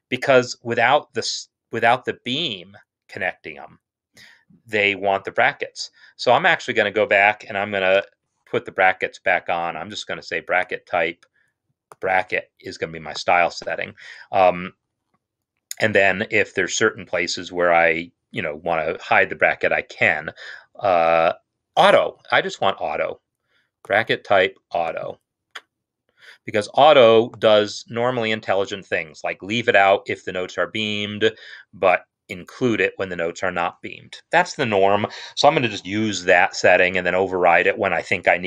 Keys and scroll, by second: 8.0 super+8.